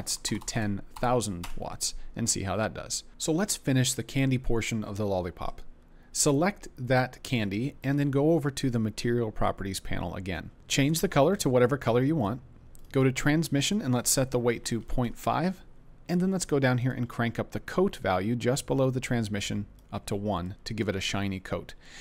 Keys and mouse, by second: 0.4 KP_0, 0.5 KP_0, 6.2 click, 13.8-15.1 drag, 16.8 click, 19.6 click.